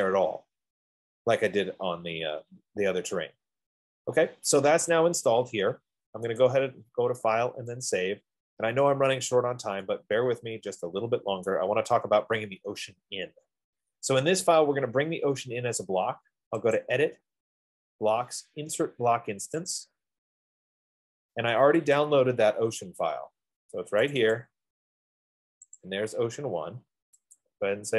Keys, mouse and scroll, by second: 4.8-6.1 right drag, 6.7 click, 8.5 click, 9.6-9.9 scroll, 11.8 right click, 13.1 middle click, 15.7-16.7 right drag, 17.2-18.6 drag, 20.2 click, 22.2 click, 24.5 click, 24.7 click, 26.0 click, 27.7 click.